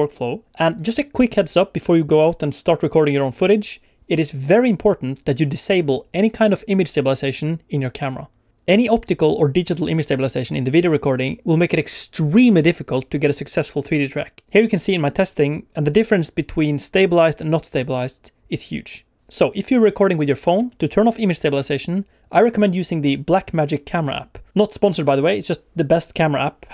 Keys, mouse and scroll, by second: 0.0 shift+middle click.